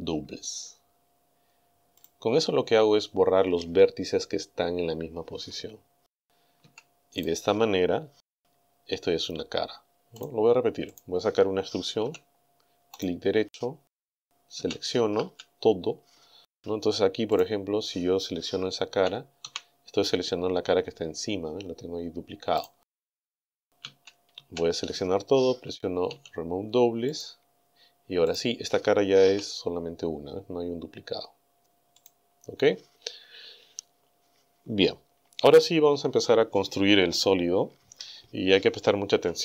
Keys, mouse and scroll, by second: 2.0 click, 6.6 a, 7.2 right click, 8.3 g, 10.2 right click, 10.9 right click, 12.0 e, 13.0 right click, 14.6 a, 16.5 a, 17.4 right click, 19.5 g, 22.6 right click, 23.9 a, 26.1 w, 27.1 click, 28.3 right click, 29.3 g, 32.0 right click.